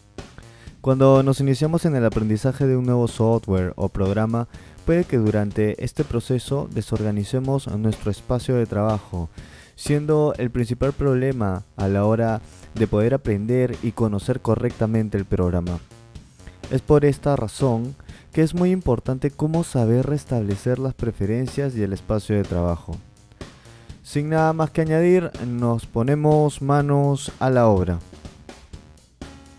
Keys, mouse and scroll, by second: 23.4-24.2 drag.